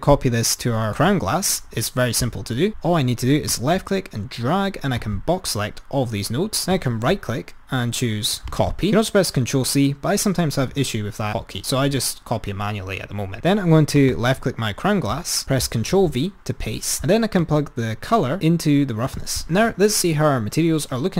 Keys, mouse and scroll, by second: 2.7 click, 3.8 drag, 6.8-8.5 right drag, 14.1 click, 16.2 ctrl+v, 17.5-17.9 drag.